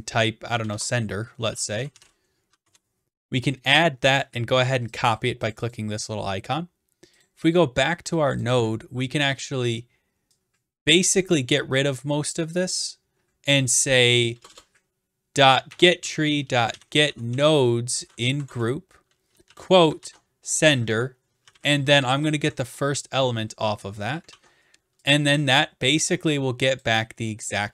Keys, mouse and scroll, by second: 0.7-2.5 typing, 2.6 Return, 4.2 click, 4.7 click, 5.0 click, 5.2 click, 5.5 click, 5.7 click, 7.2 click, 8.5 click, 13.7 click, 14.3 BackSpace, 14.5 BackSpace, 16.2-18.3 typing, 18.5 Return, 20.0 ctrl+v, 20.5 ", 20.6 Right, 20.9 Right, 21.4 [, 21.5 ], 21.9 Left, 22.1 0, 22.4 Right, 24.3 ctrl+s, 26.8-27.7 drag.